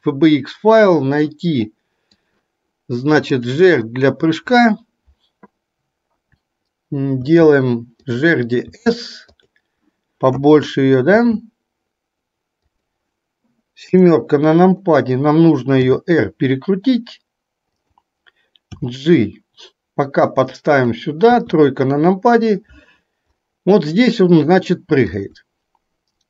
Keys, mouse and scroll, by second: 8.9 s, 11.3 s, 13.9 KP_7, 15.9 r, 18.8 g, 21.6 KP_3, 25.3-26.2 drag.